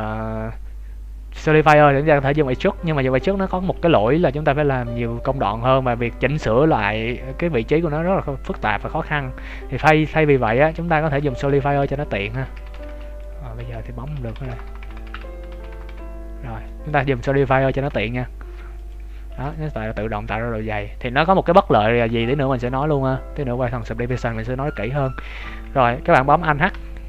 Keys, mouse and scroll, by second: 3.4 KP_1, 4.0 z, 8.1-8.6 scroll up 5, 8.8 Tab, 9.1-9.6 scroll down 2, 9.6-10.5 scroll down 3, 10.1 Tab, 10.5-11.4 ctrl+z, 11.4 Tab, 11.8 ctrl+z, 13.0 middle click, 13.2 Tab, 13.5 z, 14.1 ctrl+z, 15.1 Tab, 15.4 ctrl+z, 16.6 middle click, 18.7 click, 19.2 ctrl+s, 19.7 middle click, 22.0 shift+scroll up 1, 22.1 shift+middle click, 22.5 middle click, 24.1 shift+middle click, 24.5 scroll down 3, 24.8 ctrl+s, 26.7 alt+h.